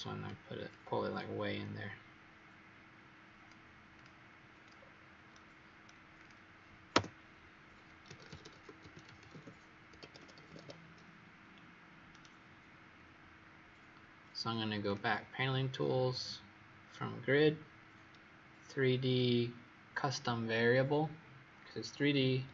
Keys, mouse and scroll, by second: 0.6 click, 4.7-5.2 scroll down 4, 5.2 right click, 6.1 click, 6.9 Return, 8.5-9.6 typing, 9.9 Escape, 10.2 Escape, 12.0 right click, 13.3-14.8 scroll up 4, 14.8 click.